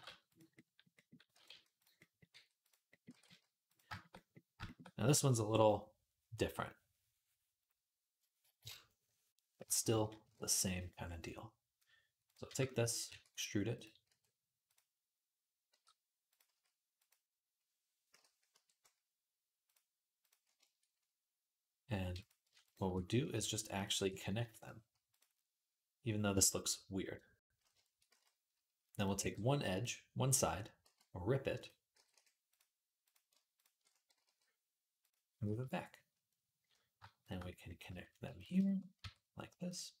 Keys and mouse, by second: 0.1-3.9 drag, 1.1 r, 2.7 g, 2.9 r, 3.9-10.8 middle drag, 9.5 KP_1, 10.0 KP_3, 12.0 click, 12.9 e, 13.9 r, 15.5 g, 16.3-21.4 drag, 16.3 s, 17.9 l, 18.3 q, 22.3 shift+a, 23.1 shift+a, 23.6 click, 24.1 q, 27.9 middle click, 28.0 z, 28.8 click, 28.9-35.1 middle drag, 29.0 b, 30.7 v, 31.8 g, 33.9 g, 35.3 z, 38.5-40.0 shift+middle drag, 38.8 q.